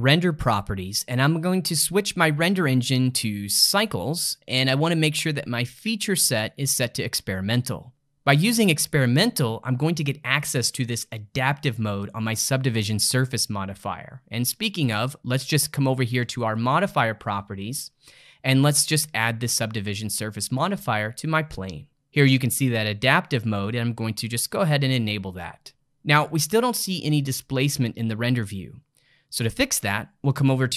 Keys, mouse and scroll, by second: 2.9-5.9 drag, 6.4-7.9 drag, 16.5 click, 18.7-21.9 drag, 24.5 click.